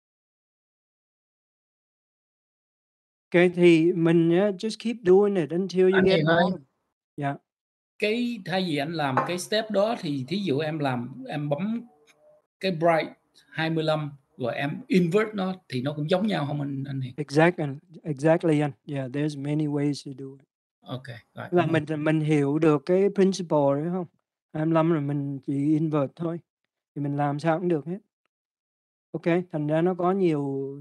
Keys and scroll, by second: 0.2 Return.